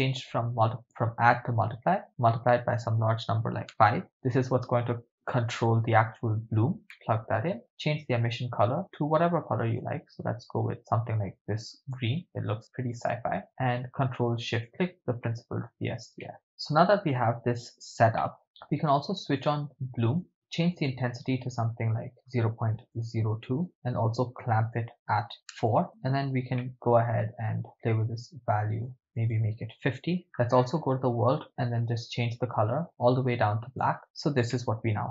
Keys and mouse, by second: 0.2-1.5 drag, 2.2-3.9 drag, 4.9 click, 6.9 middle click, 8.0 click, 12.9 click, 14.7 ctrl+shift+click, 15.2-15.7 middle drag, 16.4-17.3 drag, 18.4-20.3 middle drag, 20.3 click, 22.1-23.7 drag, 25.1 click, 26.6 middle click, 27.6-28.9 drag, 29.2-30.2 drag, 31.4 click, 32.1 click, 34.0 middle click, 34.5-35.1 middle drag.